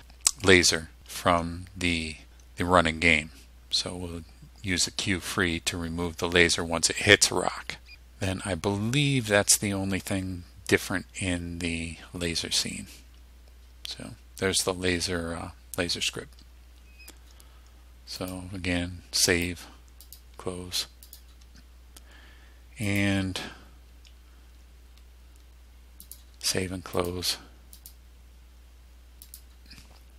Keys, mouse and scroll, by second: 18.3 click, 19.4 click, 20.1 click, 21.2 click, 23.0 click, 26.1 click, 27.1 click, 27.9 click, 29.4 click.